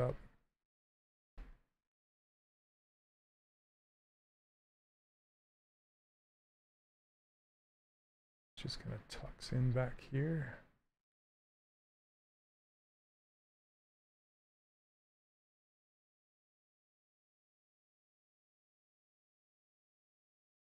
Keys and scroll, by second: 8.5 s.